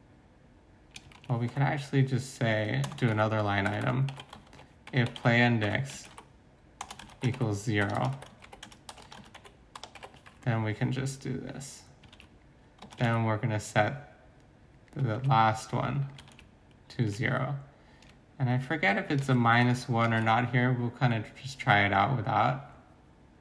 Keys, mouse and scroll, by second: 0.8-1.5 typing, 1.1 ctrl+c, 2.8 Return, 3.0-10.0 typing, 10.3 Right, 12.0 typing, 12.1 ctrl+c, 13.0 ctrl+v, 15.0 typing, 15.1 ctrl+c, 16.3 ctrl+v, 17.0 ctrl+s, 19.2 ctrl+s, 19.5 BackSpace, 20.0 ctrl+s.